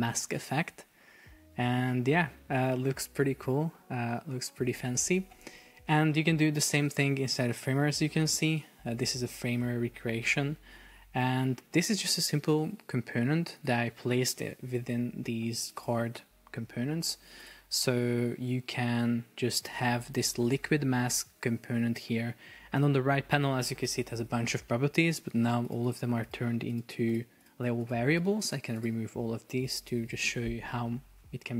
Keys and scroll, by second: 4.8 super+Tab, 11.5 Escape.